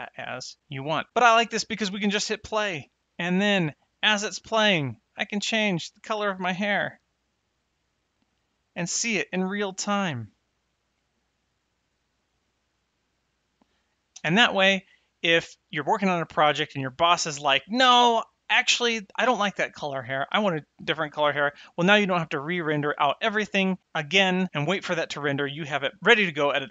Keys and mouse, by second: 1.8 space, 3.9 click, 6.7 click, 14.1 space.